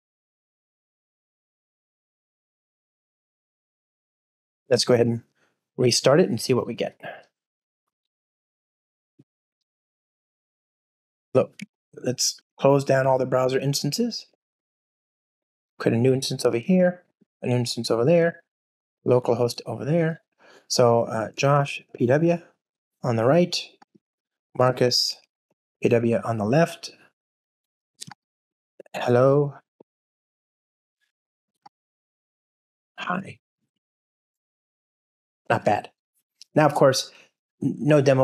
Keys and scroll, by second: 0.3 alt+BackSpace, 2.0 Return, 3.0 Return, 4.9 alt+super+l, 4.9 ctrl+alt+shift+r.